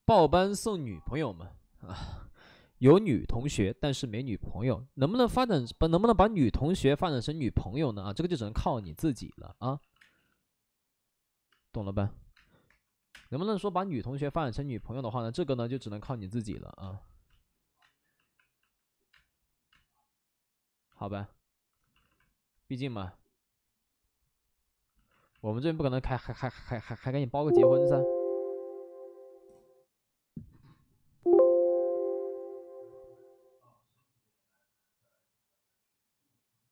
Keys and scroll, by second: 8.6 alt+s, 8.8 space, 9.7 x, 9.9 space, 11.5-13.0 typing, 14.2 alt+s, 14.7 alt+s, 15.7 alt+s, 16.0 space, 16.8 space, 17.2 space, 17.7 space, 18.2 alt+s, 19.1 space, 19.6 space, 21.9 alt+s, 22.8 alt+s, 25.1 alt+s, 27.8 alt+s.